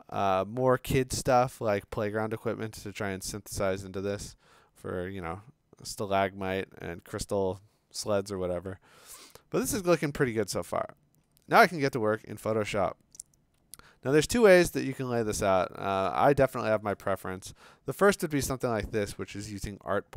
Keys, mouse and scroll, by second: 0.8 scroll, 2.2-2.5 scroll, 3.5 scroll, 4.2 scroll, 7.4-8.0 scroll, 8.6-9.2 scroll, 9.8-10.4 scroll, 11.3-11.8 scroll, 11.9 click, 13.0 Escape, 13.9 v, 14.2 click, 15.0-16.6 scroll, 17.8-18.4 scroll.